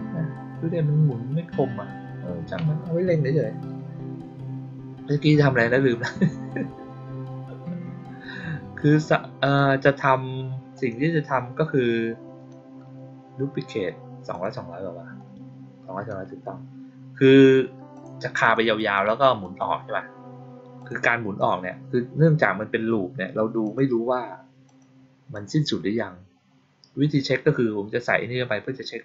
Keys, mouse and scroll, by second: 9.3 click, 10.6 click, 14.2 click, 17.8 click, 18.3 click, 18.8 click, 19.3 click, 20.7 click, 21.3 click, 23.5 click, 24.6 click, 25.2 click.